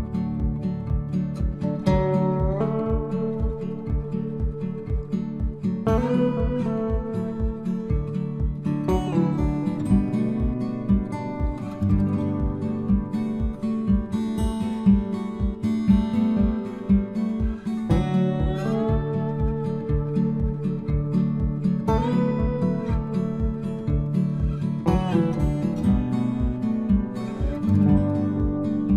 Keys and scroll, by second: 11.3 ctrl+c, 13.7 ctrl+v.